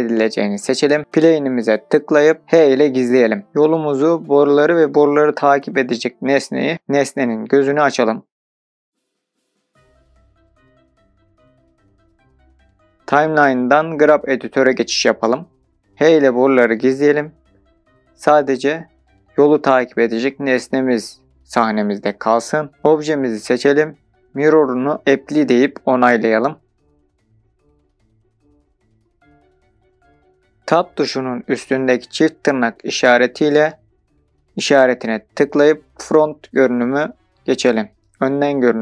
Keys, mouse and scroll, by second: 0.8 click, 2.4 h, 5.1 click, 8.9 click, 9.8-12.9 drag, 13.1-15.9 drag, 16.0 h, 18.4-18.9 drag, 18.9 h, 19.5 click, 21.2 h, 23.0 middle click, 23.0 scroll down 4, 23.2-23.6 drag, 23.6 middle click, 26.0 drag, 27.4 click, 28.3-30.1 drag, 33.8-34.8 scroll up 2, 34.8-36.2 middle drag, 37.4-38.0 scroll down 3.